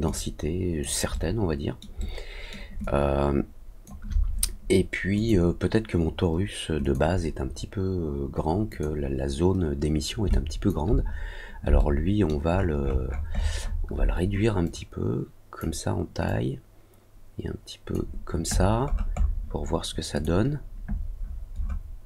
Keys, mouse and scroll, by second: 0.0 alt+click, 1.0 alt+middle click, 1.9 alt+middle click, 2.8-3.8 alt+drag, 5.1 click, 6.8 click, 8.6 click, 10.3 alt+click, 11.7 alt+middle click, 12.5-12.8 alt+scroll up 2, 12.8 alt+scroll down 2, 13.1-13.7 alt+scroll up 3, 14.6 click, 16.2-17.9 drag, 18.5-19.0 scroll down 2, 19.1 scroll up 1, 19.2 scroll down 1, 20.1 click, 21.1 scroll down 1, 21.2 scroll up 1, 21.5-22.0 scroll down 3.